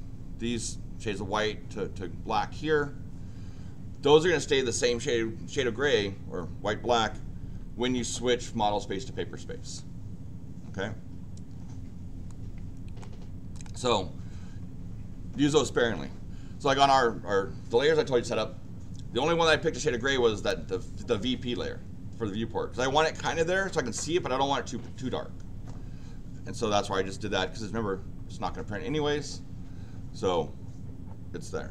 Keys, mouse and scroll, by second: 12.3 click, 13.5 click.